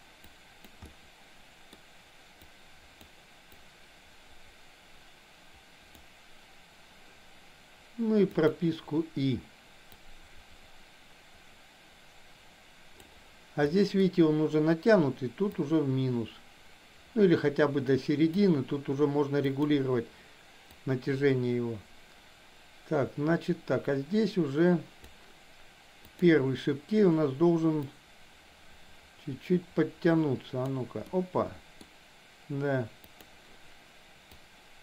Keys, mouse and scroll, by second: 0.2 click, 0.9 middle click, 2.4 click, 3.6-5.9 drag, 8.3 click, 9.9-13.2 drag, 13.7 middle click, 15.4-18.3 drag, 19.4 click, 20.8-25.1 drag, 26.1 click, 27.8-30.7 drag, 31.1 middle click, 33.1 click, 34.4-34.8 drag.